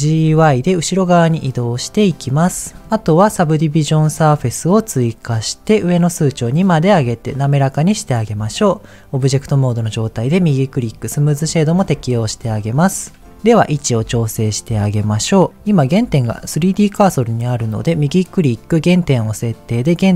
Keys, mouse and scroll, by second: 0.2 y, 2.1 click, 2.6 middle click, 5.3 click, 6.5 click, 10.0-11.2 right drag, 11.7-13.3 scroll down 4, 14.0 KP_1, 16.3 r, 17.1-20.1 right drag.